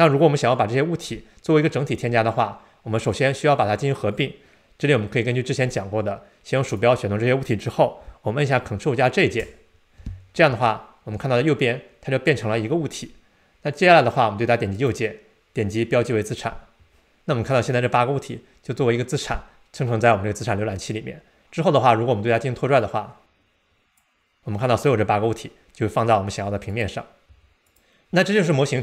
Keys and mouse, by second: 5.7-10.8 drag, 14.8-16.4 right drag, 22.9-24.1 drag, 26.7 click, 27.3 x.